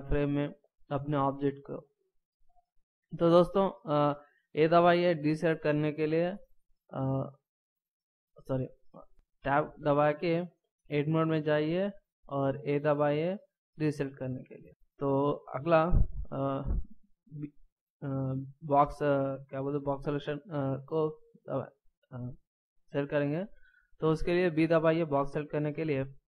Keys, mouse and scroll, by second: 5.0 a, 7.9 right click, 9.4 Tab, 13.9 a, 24.5 b.